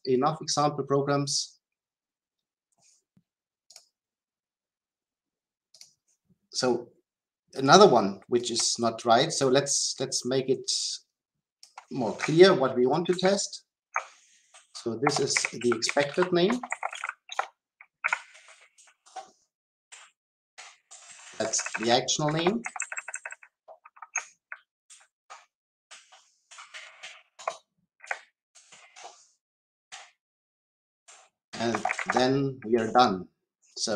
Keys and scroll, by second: 13.2 ctrl+alt+v, 24.9 ctrl+alt+v, 32.1 Return.